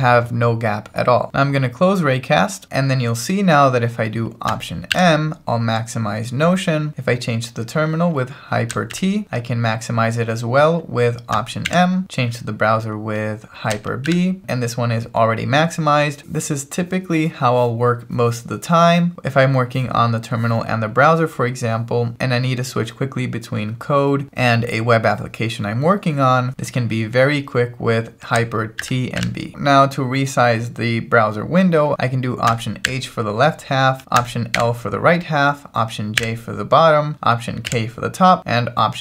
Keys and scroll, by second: 4.9 alt+m, 9.1 ctrl+alt+shift+super+t, 11.7 alt+m, 14.1 ctrl+alt+shift+super+b, 28.8 ctrl+alt+shift+super+t, 29.2 ctrl+alt+shift+super+b, 31.9 alt+m, 32.8 alt+h, 34.6 alt+l, 36.2 alt+j, 37.7 alt+k.